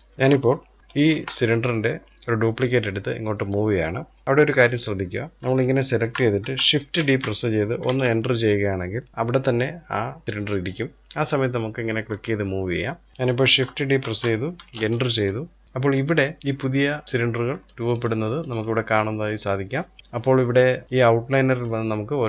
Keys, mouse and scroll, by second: 0.0 click, 0.8 shift+d, 3.9 Delete, 4.2 click, 4.8-5.3 scroll down 1, 5.3-6.5 shift+middle drag, 6.5 shift+d, 10.2 click, 13.6 shift+d, 16.8 click, 17.2 click, 17.6 click, 18.0 click, 21.2 click.